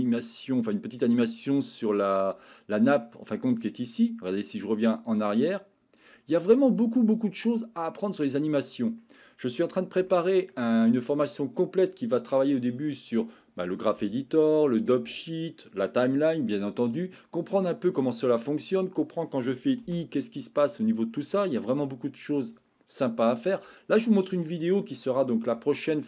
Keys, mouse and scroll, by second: 3.5 click, 6.0 click, 7.4 click, 8.4 middle click, 10.1-10.5 shift+middle drag, 21.7 Escape.